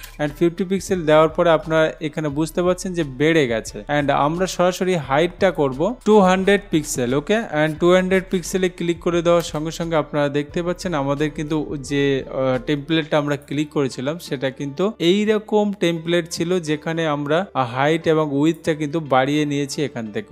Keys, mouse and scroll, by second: 0.3 Return, 5.2 click, 6.1-7.6 typing, 9.7 Return, 13.5 click, 18.8 click.